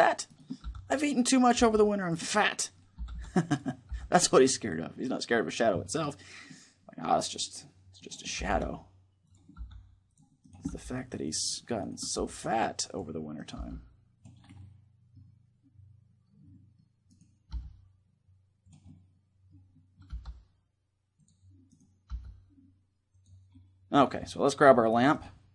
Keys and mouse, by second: 0.4 right click, 0.4 r, 1.3 g, 1.8 click, 2.7 r, 3.2-5.9 drag, 3.6 g, 5.9-7.8 middle drag, 7.8-9.3 right drag, 8.1 r, 9.1-14.3 drag, 9.3 r, 10.2 right click, 10.4 r, 11.9 r, 13.3 g, 15.2 click, 15.7-16.8 middle drag, 16.8-18.5 right drag, 17.3 g, 18.6-20.4 drag, 19.8 g, 20.4 middle click, 21.0 click, 21.8 g, 22.9 right click, 23.2-24.7 drag, 24.7 middle click, 24.8-25.5 right drag.